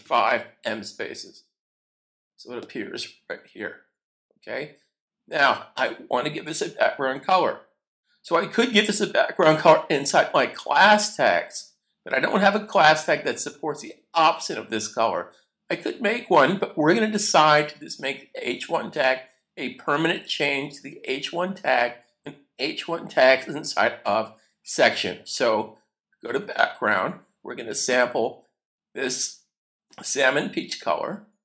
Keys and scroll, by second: 0.0-1.0 typing.